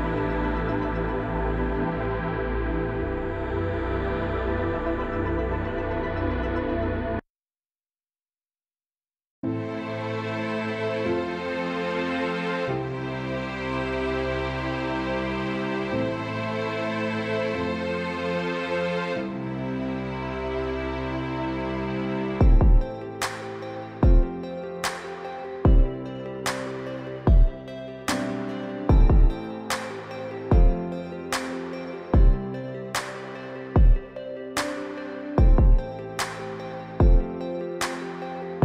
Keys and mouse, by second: 8.5 middle click, 10.8-12.2 drag, 12.2 [, 12.4-13.6 drag, 13.7 ctrl+z, 13.7-15.9 typing, 13.8 click, 14.0 ctrl+z, 14.1 click, 14.3 click, 14.9 click, 15.6 ctrl+z, 16.1 click, 16.5 ctrl+z, 16.7 ctrl+z, 17.4 ctrl+z, 17.4 click, 17.6 ], 17.7 click, 19.0 [, 19.0 [, 20.0 click, 20.0 [, 20.6 ctrl+z, 20.6 ctrl+z, 20.6 [, 22.4 click, 23.4 ctrl+z, 23.8 click, 24.2 click, 24.7 click, 24.7-27.3 typing, 25.3 ctrl+z, 25.5 click, 26.0 click, 26.5 ctrl+z, 26.6 click, 26.9 ctrl+z, 27.1 click, 27.4 click, 30.1 click, 30.8-31.2 drag, 31.5 click, 32.0 ctrl+z, 32.4 ctrl+z, 32.4 click, 33.0 ], 33.1 click, 33.4 click, 34.2 ctrl+z, 34.5 click, 36.7 ctrl+z, 36.7-37.1 typing, 38.1 click.